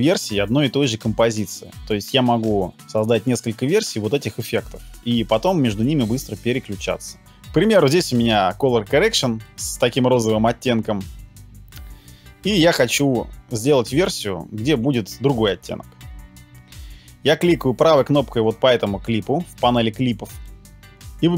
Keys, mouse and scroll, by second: 20.3 right click.